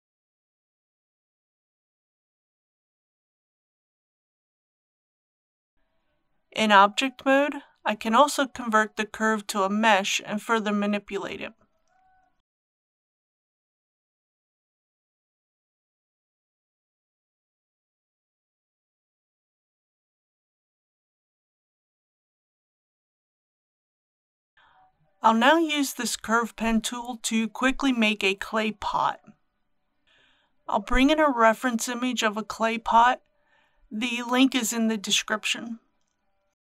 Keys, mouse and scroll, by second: 0.8 shift+middle click, 2.5-4.4 drag, 5.7-6.7 scroll up 1, 6.8 Tab, 8.9 right click, 12.9 click, 13.4 Tab, 15.1 3, 16.0 click, 17.1 g, 17.6 click, 18.5 a, 18.9 middle click, 19.6 typing, 20.1 click, 20.9-22.4 middle drag, 22.5 Tab, 23.8 click, 27.6 KP_1, 28.8 shift+middle click, 30.0 click, 30.5 shift+a, 35.9 click.